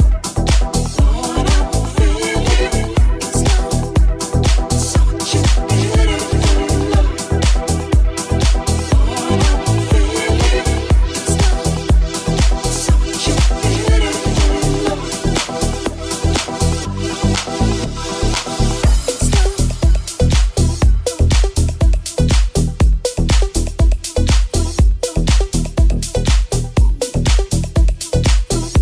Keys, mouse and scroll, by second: 7.7 s, 9.2 e, 22.0 ctrl+r, 27.3-28.8 ctrl+drag, 27.7 alt+z, 28.5 alt+middle click, 28.5 alt+right click.